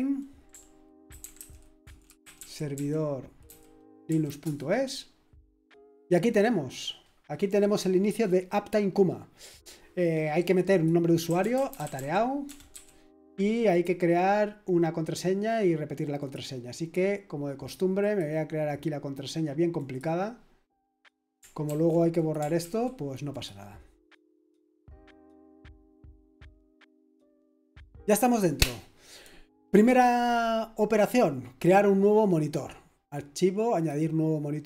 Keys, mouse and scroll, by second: 1.1-4.4 typing, 10.7 click, 11.0-12.7 typing, 13.7-14.7 drag, 16.2 click, 18.0 click, 19.8-21.4 drag, 21.6 ctrl+v, 22.1 click, 22.6 ctrl+v, 23.3-25.3 drag, 33.7-34.6 drag.